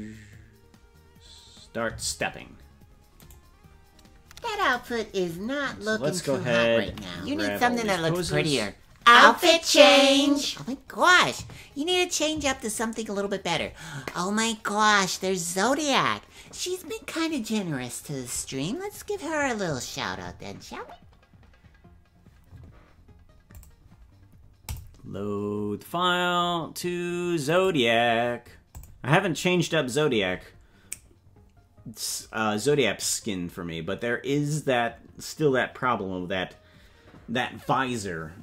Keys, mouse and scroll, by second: 1.9 space, 3.3 right click, 6.9 right click, 6.9 a, 7.8 right click, 8.2 g.